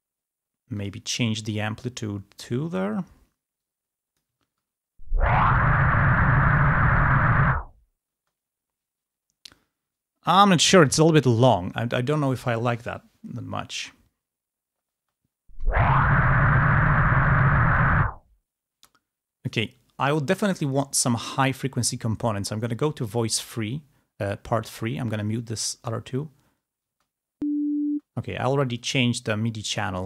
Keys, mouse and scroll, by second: 0.8 click, 3.6 click, 4.6 space, 8.2 space, 15.1 space, 18.8 space, 20.7 click, 21.0-21.6 scroll up 1, 23.4 middle click, 24.7 middle click, 25.1 middle click, 25.9 space, 27.0 space, 28.0 space, 28.8 click.